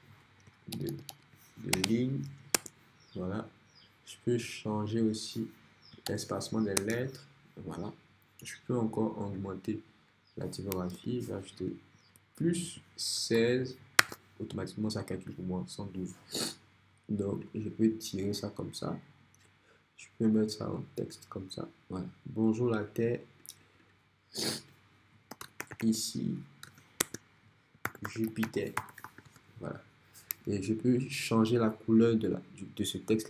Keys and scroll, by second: 0.4-1.7 typing, 2.6 Return, 6.1 shift+0, 6.8 Return, 11.0 Right, 12.2-13.9 typing, 14.0 Return, 25.1-29.6 typing, 27.0 Return.